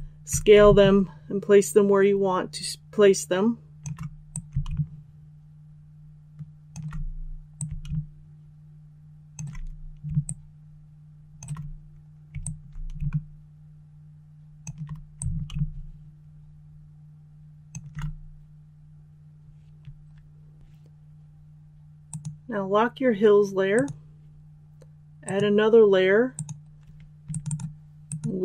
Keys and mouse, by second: 10.2 shift+click, 12.4-14.6 alt+drag, 15.1 click.